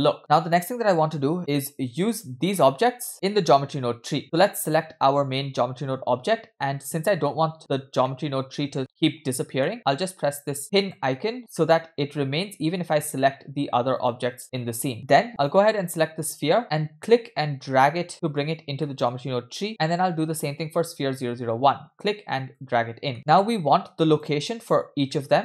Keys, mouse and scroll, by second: 1.4 click, 4.7 click, 7.8 scroll down 2, 8.1-9.7 middle drag, 9.7 scroll up 3, 10.8 click, 13.1 click, 14.0 click, 14.7 click, 14.9-15.2 scroll down 2, 15.4 click, 16.6 click, 17.2 click, 18.9 middle click, 19.2-19.6 scroll up 2, 19.7 click, 20.6 click, 21.1 click, 23.1 click, 23.1 scroll down 1, 23.4-23.8 middle drag, 24.2 click, 24.7 click, 25.1 middle click.